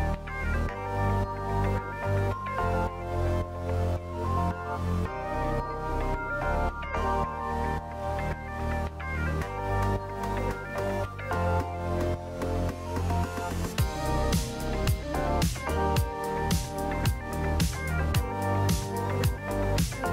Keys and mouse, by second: 1.4 Tab, 2.0 alt+z, 3.5 click, 4.9 KP_Decimal, 6.4 alt+z, 6.8 click, 7.8 alt+z, 14.7 shift+click, 17.9 ctrl+z, 18.8 m.